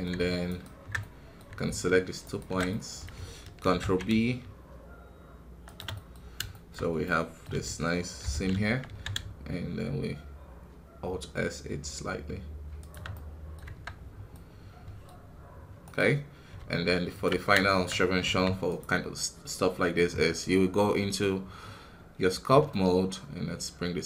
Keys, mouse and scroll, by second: 2.2 alt+shift+right click, 2.6-3.6 middle drag, 3.6 ctrl+b, 5.9 middle click, 6.1 scroll up 1, 6.4 shift+middle click, 6.7 scroll up 2, 7.0-8.2 middle drag, 8.2 ctrl+KP_Subtract, 8.8 alt+s, 13.1 middle click, 13.6 Tab, 13.9 scroll down 2, 14.3-15.3 middle drag, 15.3-15.8 scroll down 2, 15.8 right click, 16.3 scroll up 2, 16.5 ctrl+Tab, 17.6 shift+middle click, 17.8-18.3 scroll up 2, 18.3 f, 22.6-24.0 ctrl+middle drag.